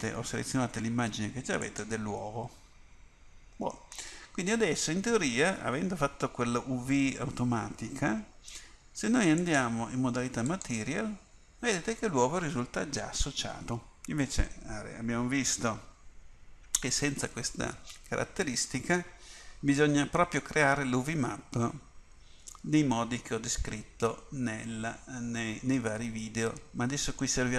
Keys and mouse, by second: 9.5-17.2 drag, 22.7-24.0 middle drag.